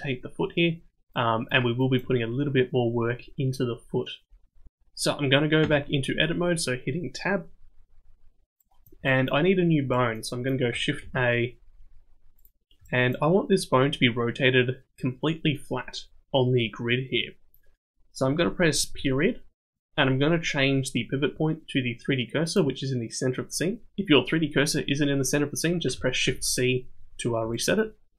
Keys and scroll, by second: 5.6 Tab, 11.0 shift+a, 26.2 shift+c.